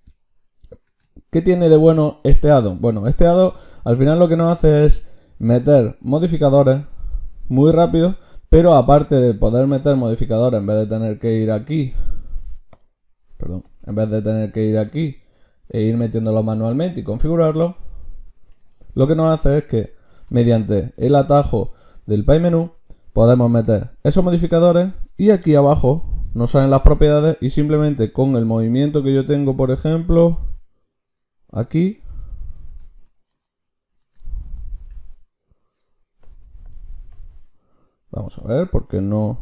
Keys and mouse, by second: 0.9 ctrl+shift+q, 13.7-18.7 drag, 18.7 Escape, 20.1 ctrl+shift+q, 34.7 Tab, 37.0-39.4 drag, 38.7 ctrl+shift+q.